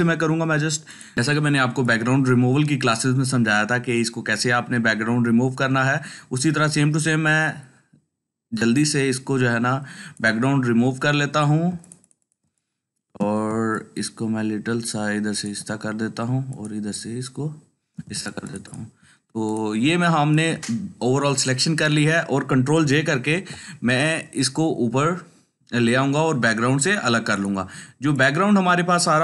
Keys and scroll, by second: 23.2 ctrl+j.